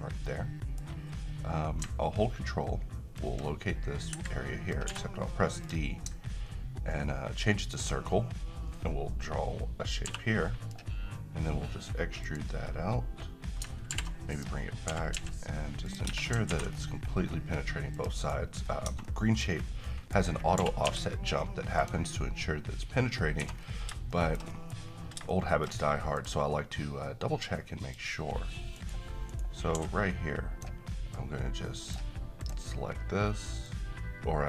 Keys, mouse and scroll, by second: 0.2-0.9 middle drag, 3.1-4.8 ctrl+click, 4.1 Escape, 4.8 d, 5.6 click, 7.7-10.8 ctrl+drag, 10.0 j, 12.2 click, 13.9-15.1 typing, 14.3 click, 15.9 click, 16.1 Tab, 16.5 ctrl+r, 16.7-17.4 scroll up 1, 17.9 click, 18.2 right click, 18.7 scroll down 1, 18.8 Tab, 19.1-19.7 middle click, 19.5 scroll up 1, 19.8 middle click, 19.9 middle click, 20.2-20.6 scroll up 1, 20.6 typing, 21.8 click, 23.4 1, 23.6 scroll down 1, 24.1 shift+middle click, 24.7-25.2 scroll up 1, 25.3-25.9 middle click, 26.1 click, 28.7 right click, 29.7 d, 31.4-32.0 drag.